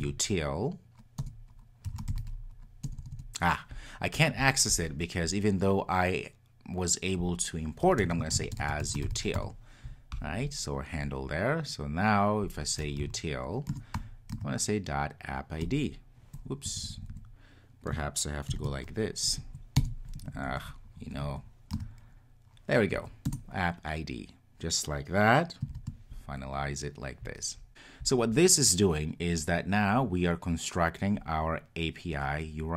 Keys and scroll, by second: 13.7 Return, 23.3 Return.